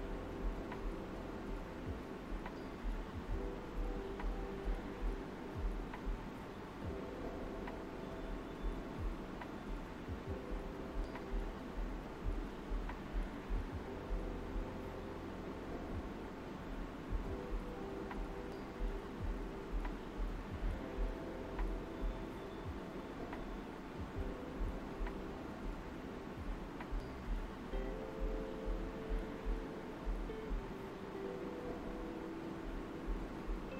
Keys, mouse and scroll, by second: 1.5 shift+click, 3.0 alt+right click, 4.0 alt+right click, 4.7 alt+right click, 5.3 alt+click, 5.6 alt+right click, 6.9 alt+right click, 8.7 click, 10.0 shift+click, 11.0 alt+right click, 11.3 alt+click, 11.6 right click, 12.9 click, 14.0 shift+click, 14.7 alt+right click, 16.0 click, 17.2 shift+click, 18.2 alt+right click, 20.2 click, 21.3 shift+click, 22.1-24.6 alt+right drag, 26.0 click, 26.5 shift+click, 27.3 alt+right click, 28.0 alt+right click, 30.8 alt+right click, 31.7 alt+right click.